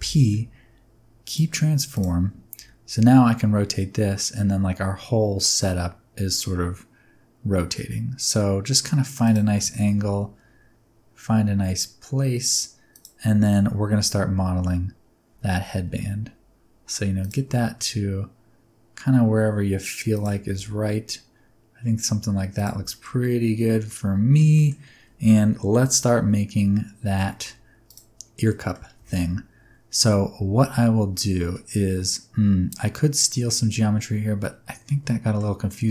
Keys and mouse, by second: 0.0 ctrl+p, 2.5 r, 9.2 ctrl+click, 9.8 g, 12.9 click, 13.4 shift+middle click, 15.7 g, 17.2 click, 17.4 r, 20.1 click, 20.5 g, 22.5 click, 22.5 g, 22.8 shift+middle click, 23.3-24.3 middle drag, 24.6 middle click, 25.7 KP_1, 27.2 middle drag, 28.4 middle drag, 28.9 Tab, 30.3 Tab, 30.7 middle click, 34.8 middle click, 35.6 middle click.